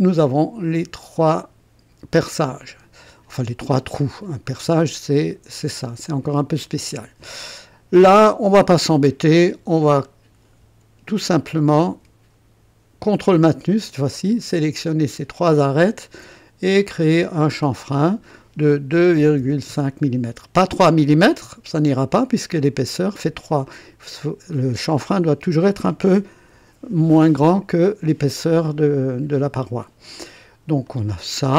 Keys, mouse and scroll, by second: 1.4-4.0 drag, 3.3 right click, 4.1 click, 8.2 click, 10.0 click, 13.0 ctrl+click, 15.5 ctrl+click, 17.3 click, 18.9 KP_2, 19.3 KP_5, 19.3 ., 19.6 Return, 21.3 click, 23.6 click, 28.6-30.4 drag, 30.8-31.5 drag.